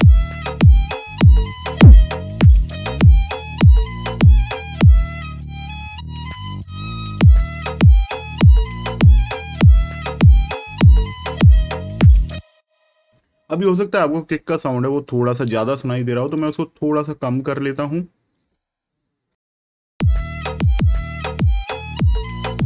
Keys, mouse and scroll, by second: 1.0 shift+click, 1.6 shift+click, 6.9 shift+click, 8.6 click, 10.1 shift+click, 12.3 click, 14.2 right click, 16.2 click, 19.9 space, 20.1 click.